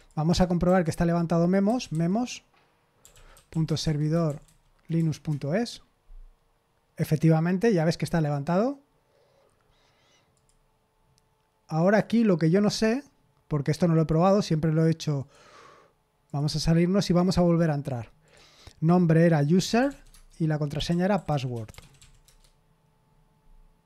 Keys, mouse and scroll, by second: 0.6 ctrl+t, 1.4-5.8 typing, 4.9 Down, 5.2 Return, 10.3 click, 11.8 click, 13.9 click, 15.1 click, 16.2 click, 18.2 click, 19.3-21.9 typing, 22.2 Return.